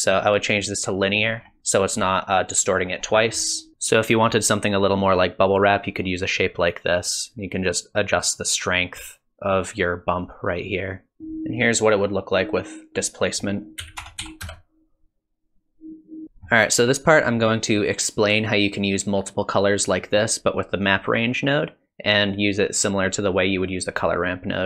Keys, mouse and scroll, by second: 17.2 middle click, 19.2 click, 19.8 click, 24.6 middle click.